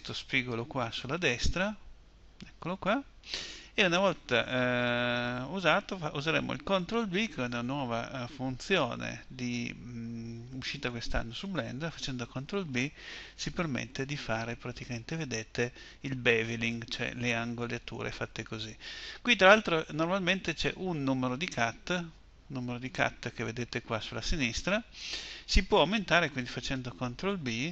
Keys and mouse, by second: 12.4 ctrl+b.